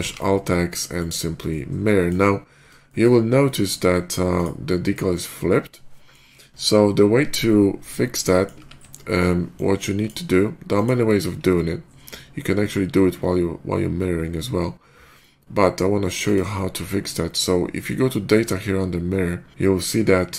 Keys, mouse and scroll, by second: 0.8 click, 1.3-1.9 middle drag, 2.2 scroll up 2, 2.7 middle click, 3.3-3.9 middle drag, 4.2 click, 4.8-6.0 middle drag, 8.2 ctrl+middle click, 8.4 ctrl+`, 9.4-9.9 drag, 10.6 click, 16.1 click.